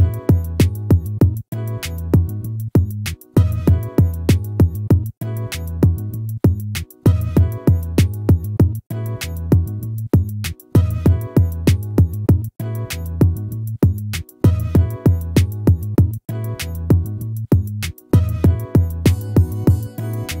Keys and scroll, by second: 8.4 ctrl+z, 15.8 ctrl+z.